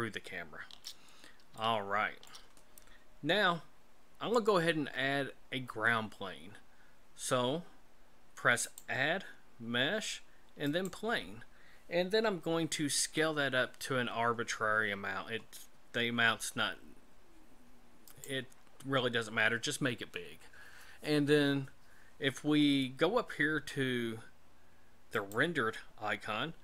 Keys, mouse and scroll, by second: 8.6 click, 13.0 s, 25.3 click.